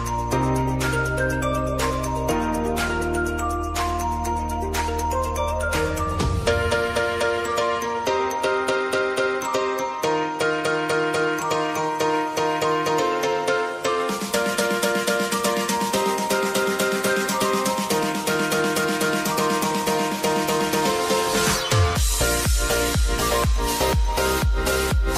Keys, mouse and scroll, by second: 0.0 right click, 1.1-6.5 drag, 9.3 r, 10.2-11.7 drag, 11.7 p, 12.6 click, 15.7 u, 16.8-17.4 typing, 19.3-25.1 drag.